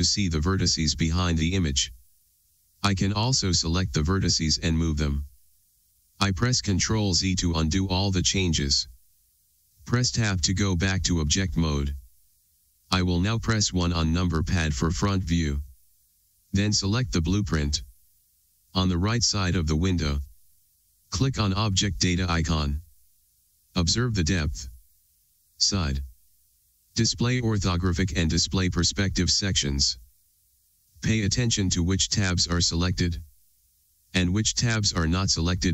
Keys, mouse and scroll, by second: 6.8-18.7 middle drag, 10.2 Tab, 11.8 alt+a, 14.4 KP_1, 18.7 click.